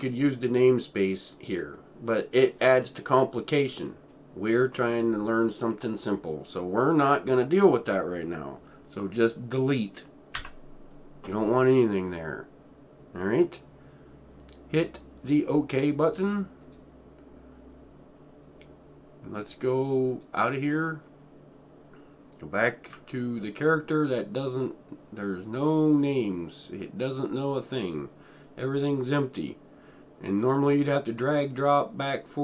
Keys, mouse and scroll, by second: 10.4 Delete, 16.6 click, 20.1 Delete, 20.1 click, 22.9 Delete, 23.4-24.0 alt+middle drag, 24.1 alt+middle click, 24.2 alt+right click, 24.2-25.2 alt+right drag.